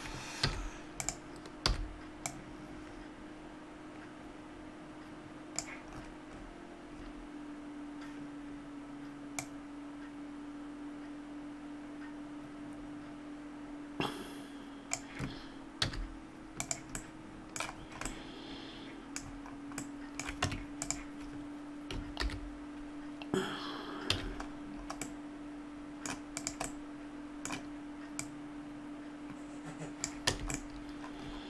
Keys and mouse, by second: 0.4 z, 1.7 b, 5.9-9.4 middle drag, 9.4-13.9 drag, 15.9 z, 17.3-18.5 middle drag, 20.5 Tab, 22.2 alt+h, 24.1 a, 25.0 middle click, 26.4-29.6 right drag, 29.6 click, 30.3 a.